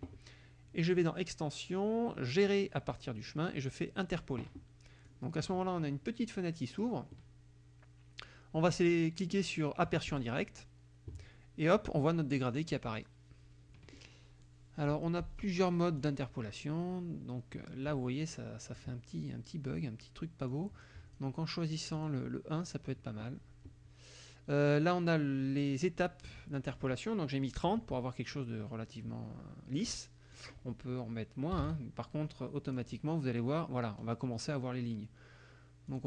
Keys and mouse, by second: 1.0 click, 4.2 click, 5.1-7.0 drag, 10.1 click, 16.0 click, 18.3 click, 20.6 click, 22.1 click, 26.6 click, 30.4 click, 31.4-32.2 typing, 32.7 click, 35.9 click.